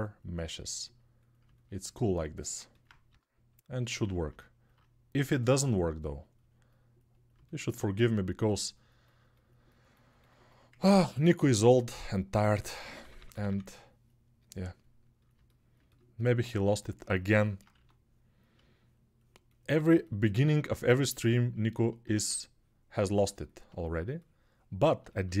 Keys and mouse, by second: 2.9 g, 12.2-13.2 typing, 15.2-25.4 alt+drag, 17.5 1, 21.9 ctrl+z.